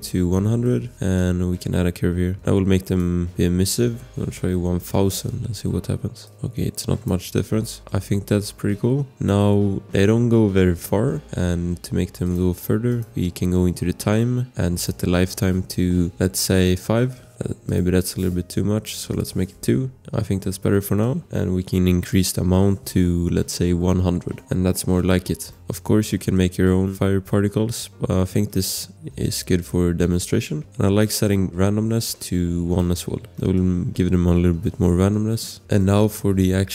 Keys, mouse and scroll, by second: 0.0-0.5 typing, 0.7 click, 1.1 click, 3.1 scroll, 3.9 click, 4.6 0, 4.8 Return, 6.2 click, 7.3 ctrl+z, 7.8 click, 7.8 scroll, 8.5 click, 11.0 scroll, 16.2 BackSpace, 16.6 5, 16.8 Return, 17.4 scroll, 17.6 click, 18.9 click, 19.0 shift+Return, 20.1 Return, 20.1 click, 20.3 scroll, 21.0 click, 22.1 click, 23.4-24.3 typing, 24.7 click, 24.9 click, 25.5 click, 26.3 click, 30.7 scroll, 32.2 click, 33.1 scroll, 33.3 click, 33.5 click, 35.6 click, 35.8 click, 35.8 scroll, 36.1 click.